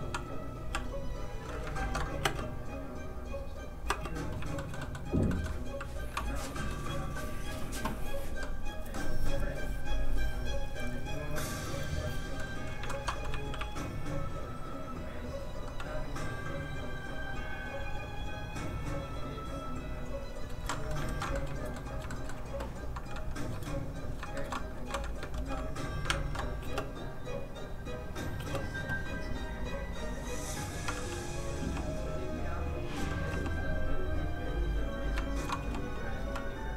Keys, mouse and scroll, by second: 0.7 f, 0.8 click, 1.1 click, 1.7 ctrl+Tab, 2.2 Tab, 2.3 space, 4.5 shift+middle click, 4.8 middle click, 4.9 middle click, 5.3 shift+middle click, 6.5 middle click, 9.1-10.5 scroll down 1, 11.3 middle click, 12.9 ctrl+Tab, 13.6 shift+r, 15.2 click, 20.7 middle click, 21.0 ctrl+z, 21.3 middle click, 21.4 shift+middle click, 22.1 shift+middle click, 23.8 middle click, 23.9 click, 24.3 shift+middle click, 24.7 ctrl+middle click, 25.3 ctrl+r, 26.0 ctrl+Tab, 26.6 Tab, 28.4 space, 29.5 click, 31.6 g, 32.5 click, 33.3 g, 34.5 click, 35.2 shift+click, 35.6 shift+g, 36.0 click, 36.2 s.